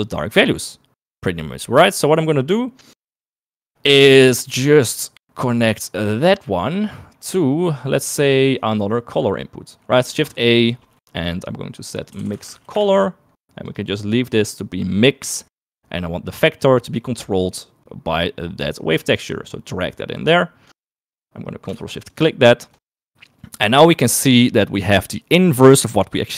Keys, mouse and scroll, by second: 2.2 middle click, 3.4 middle click, 4.7 middle click, 7.3 middle click, 8.4 middle click, 10.1 shift+a, 14.1 click, 15.7 middle click, 16.3 middle click, 17.5 middle click, 18.9-20.9 drag, 21.5 middle click, 22.4 ctrl+shift+click.